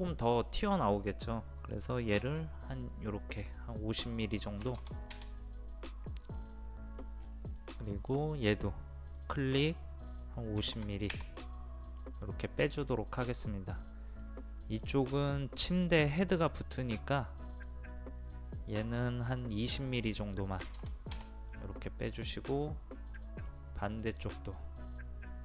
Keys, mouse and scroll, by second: 2.2-3.3 drag, 4.6 KP_5, 4.8 KP_0, 6.4 middle click, 7.2-7.6 scroll up 1, 7.6 middle click, 9.2 click, 10.6 KP_5, 10.7 KP_0, 12.0-13.4 middle drag, 13.7 scroll up 1, 14.2-16.3 middle drag, 17.5 click, 20.6 KP_2, 20.8 KP_0, 22.4-25.4 middle drag.